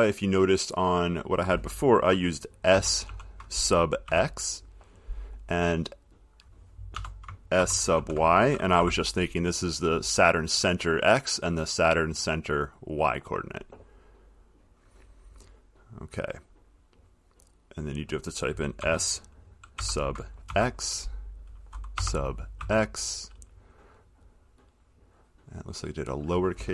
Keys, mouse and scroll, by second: 1.1 click, 2.9 s, 3.2 space, 4.2 x, 6.3 click, 7.1-8.9 typing, 14.7 click, 18.1 click, 19.0-20.6 typing, 22.1 BackSpace, 22.8 BackSpace, 25.1 click, 26.1-26.7 drag.